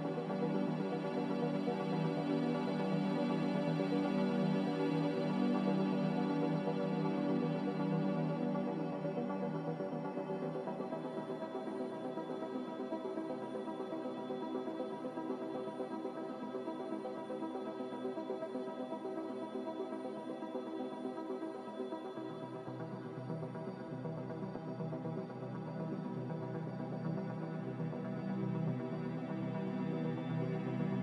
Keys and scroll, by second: 3.7-4.7 typing, 21.5 typing, 22.9 BackSpace, 23.4 Return, 30.1 2, 30.1 m.